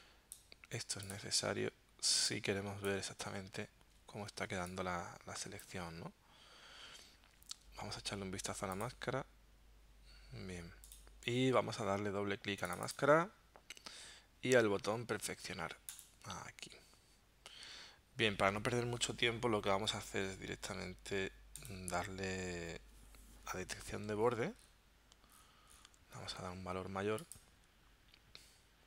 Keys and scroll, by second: 4.5 space.